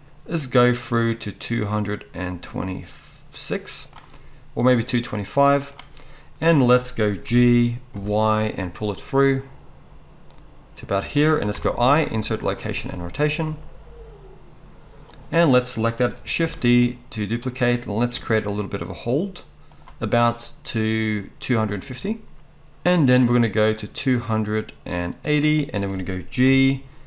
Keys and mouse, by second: 0.7-11.3 drag, 7.2 g, 11.3-15.0 middle drag, 15.0-19.8 drag, 16.4 shift+d, 19.8 middle click, 20.2-27.0 drag, 26.4 g.